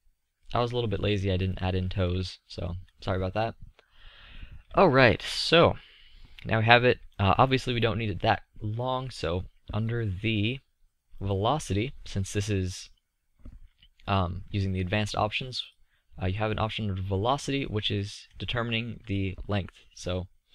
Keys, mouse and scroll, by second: 3.2-7.0 middle drag, 13.2-15.5 middle drag, 17.6-18.2 middle drag.